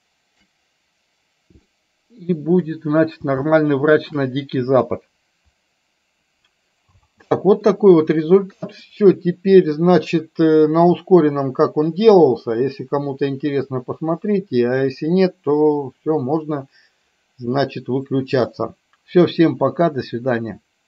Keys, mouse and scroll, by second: 1.7 middle click, 3.6 shift+middle click, 7.0 space, 7.8-9.0 middle drag.